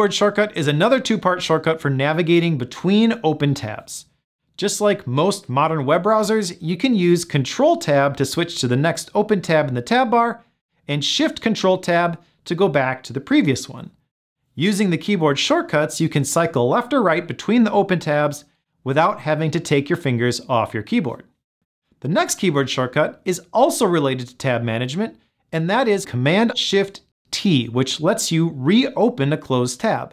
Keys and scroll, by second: 14.5 ctrl+Tab, 18.8 ctrl+shift+Tab.